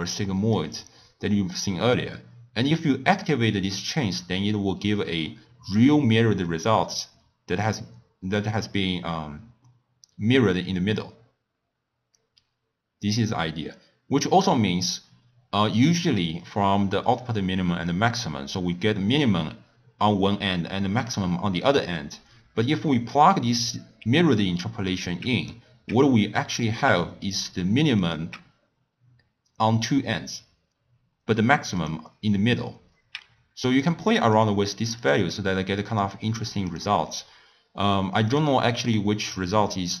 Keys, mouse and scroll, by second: 3.1 click, 19.1 click, 21.0 click, 23.1 click, 28.0 click, 31.8 click, 33.8 click, 34.4 click, 35.0-40.0 drag.